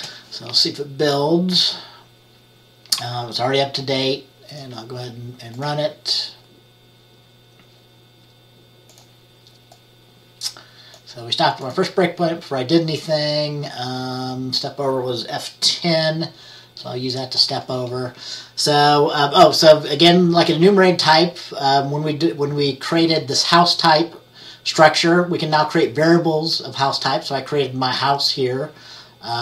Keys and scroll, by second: 17.6 F10.